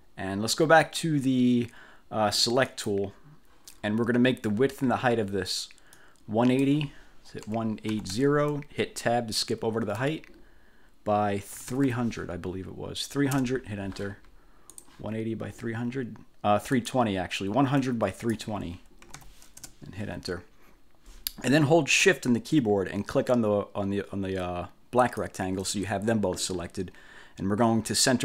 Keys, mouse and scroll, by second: 2.8 click, 6.0 click, 7.3-8.7 typing, 10.1 Tab, 11.4-12.3 typing, 13.4 Return, 14.8 click, 16.9 click, 18.0 click, 18.9-19.9 typing, 25.2 shift+click.